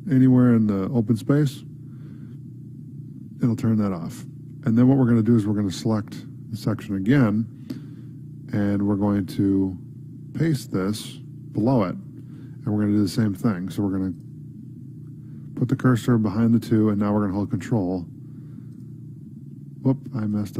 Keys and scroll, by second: 7.2 ctrl+c, 9.0 Down, 10.0 Up, 10.7 End, 11.9 ctrl+v, 12.3 ctrl+s.